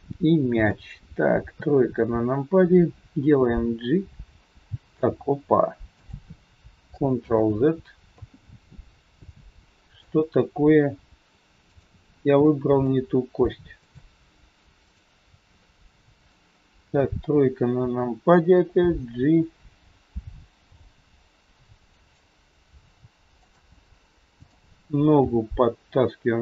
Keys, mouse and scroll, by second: 1.4 KP_3, 2.8 scroll down 5, 3.4 g, 7.2 ctrl+z, 8.7-9.4 scroll up 6, 9.2 middle click, 11.7 shift+click, 12.6 middle click, 13.8 shift+click, 15.5 middle click, 16.9 KP_3, 17.3-18.5 scroll down 5, 18.8 g, 24.3 click, 25.2 g.